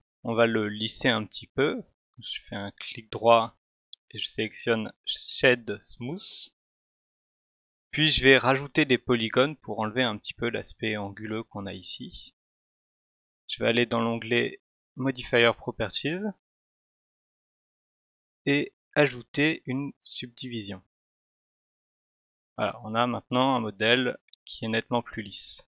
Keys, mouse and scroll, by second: 2.4 right click, 6.0 click, 14.6 click, 16.1 click, 20.0 click.